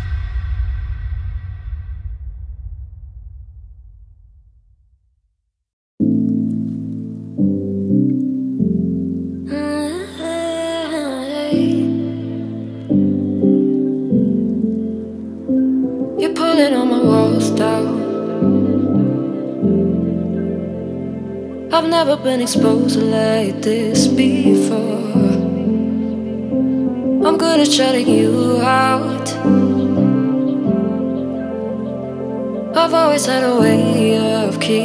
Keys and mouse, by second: 1.6 x, 2.7 click, 2.8 g, 3.3 click, 3.5 g, 3.6 z, 5.4 click, 6.0 click, 8.1 ctrl+z, 9.0 ctrl+click, 9.6 middle click, 9.9 click, 10.5 z, 12.6-13.1 drag, 13.1 middle click, 14.8 shift+middle drag, 15.6 x, 17.0 click, 17.7 click, 18.2 g, 18.2 x, 18.9 click, 19.9 middle click, 20.0-21.5 drag, 20.1 g, 21.2 shift+middle click, 21.5 middle click, 22.1 y, 24.0 middle click, 25.0 z, 26.4-27.7 drag, 29.3 z, 30.7 click, 31.8 g, 31.8 x, 33.2 click, 33.3 g, 34.3-34.8 drag.